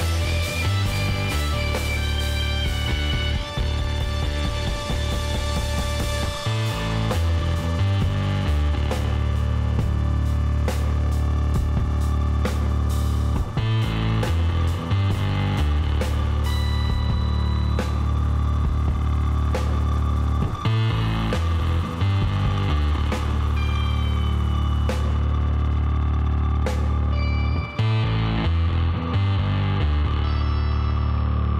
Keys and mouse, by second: 0.7 middle click, 1.2 a, 4.6-5.7 middle drag, 5.7 click, 13.3-16.3 drag, 16.7 click, 16.8-22.9 middle drag, 22.9 w, 26.4-29.4 drag.